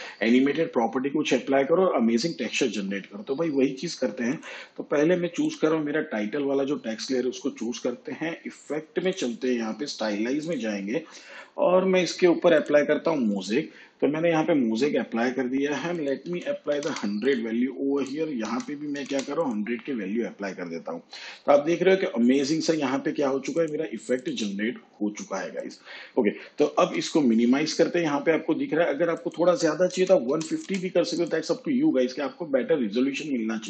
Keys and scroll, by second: 16.2 1, 16.6 0, 18.4 1, 18.9 0, 26.7 shift+/, 29.9 1, 30.2 5, 30.6 0.